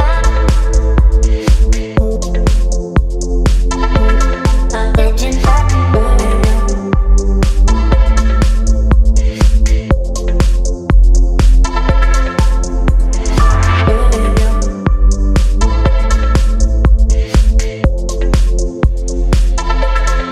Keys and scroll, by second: 1.6 Up, 1.8 Up, 2.0 Up, 2.1 Up, 2.3 Up, 8.4 ctrl+t, 11.3 ctrl+z.